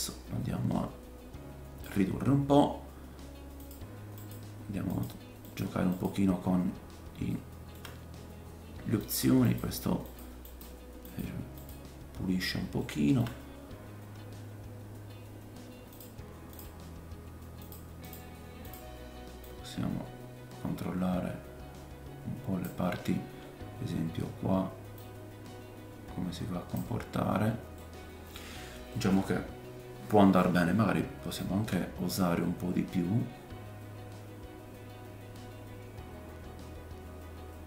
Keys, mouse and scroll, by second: 1.8-3.7 middle drag, 3.7-11.7 drag, 4.2 middle click, 4.2 right click, 4.9 middle click, 4.9 right click, 5.5 middle click, 5.5 right click, 5.9 middle click, 5.9 right click, 6.8 scroll up 2, 7.3 shift+middle click, 9.0 middle click, 9.0 right click, 9.5 middle click, 9.5 right click, 10.5 middle click, 10.5 right click, 11.1 middle click, 11.1 right click, 12.4 scroll down 1, 12.8 shift+middle click, 15.9-18.6 drag, 19.4 click, 23.0 scroll up 2, 24.9 click, 24.9-26.3 scroll up 1, 27.1-27.5 scroll down 4, 27.8 middle click, 28.9 middle click, 31.4 click.